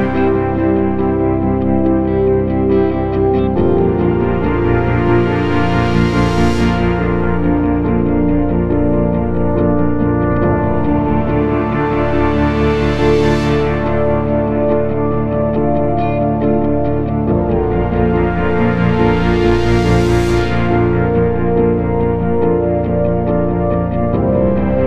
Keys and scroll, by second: 1.1 p, 2.5 ctrl+z, 5.9 F1, 8.8 F3, 9.7 F1, 18.6 ctrl+d, 18.8 Escape, 21.3 F3, 22.8 F1.